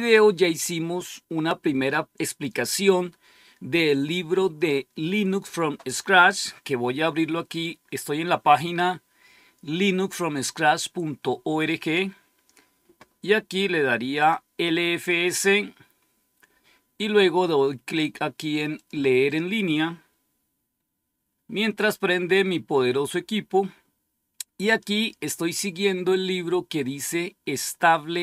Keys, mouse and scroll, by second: 14.1 click, 18.7 click, 23.3-25.1 scroll down 3, 25.1-25.8 scroll down 1.